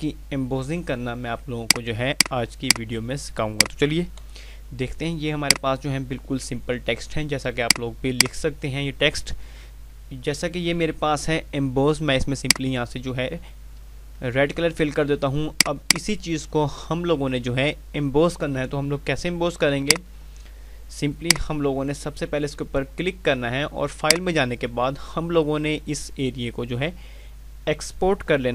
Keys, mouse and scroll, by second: 1.5 click, 4.1 F3, 5.3 click, 7.6 click, 12.3 click, 15.4 click, 20.2 click, 23.9 click.